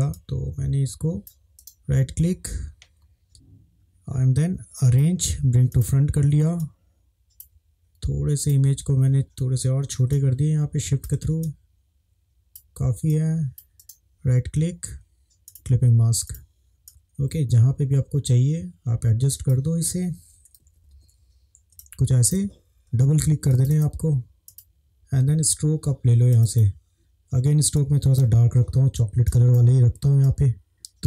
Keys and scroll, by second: 20.8 ctrl+=, 20.9 ctrl+=, 21.8 space.